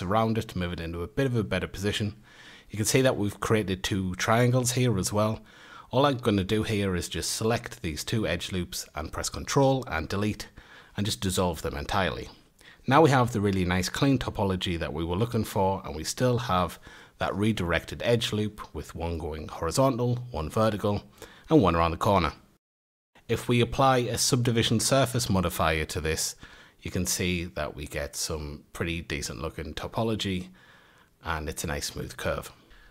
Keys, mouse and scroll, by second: 1.6 2, 3.8-4.8 scroll up 2, 4.8 2, 6.5 alt+shift+click, 7.7 alt+shift+click, 12.6 2, 14.2 shift+click, 15.1 a, 15.7 3, 16.5 alt+shift+click, 17.3 a, 18.1 alt+shift+click, 18.9 a, 19.6 alt+shift+click, 20.5 a, 21.8 Tab, 23.5-24.7 middle drag, 26.1 click, 27.5 ctrl+a, 28.0 Tab, 28.6-29.9 scroll up 4, 29.9-32.9 middle drag.